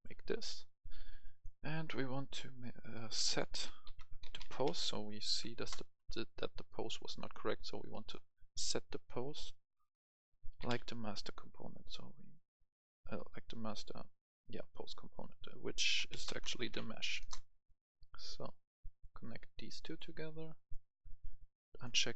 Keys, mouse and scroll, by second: 0.6 click, 3.7-4.7 typing, 5.6 Return, 6.5 click, 10.5 typing, 13.1 BackSpace, 16.0-16.8 typing, 17.2 Return, 18.3-19.4 drag.